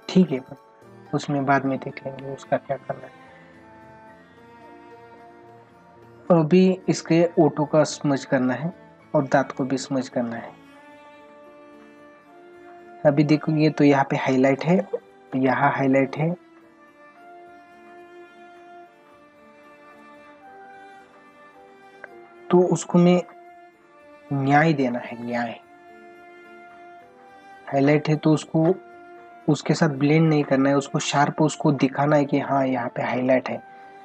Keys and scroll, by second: 5.1 ctrl+=, 9.5 space, 14.5 space.